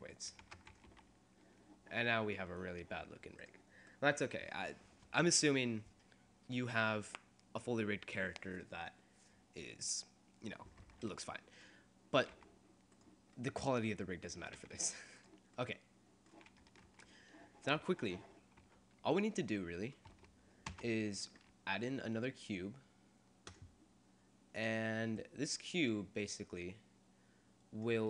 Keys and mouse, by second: 0.5 ctrl+Tab, 0.9 r, 3.9 click, 4.5 right click, 5.3 middle click, 12.4 g, 14.8 r, 17.0 ctrl+Tab, 18.8 a, 20.8 shift+a, 25.3-26.9 middle drag, 26.9 click.